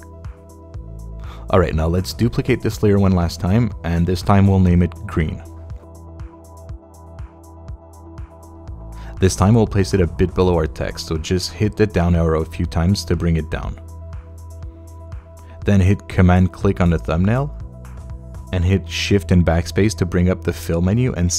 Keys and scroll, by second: 7.2-8.5 typing, 8.9 Return, 10.9 Down, 19.0 shift+BackSpace.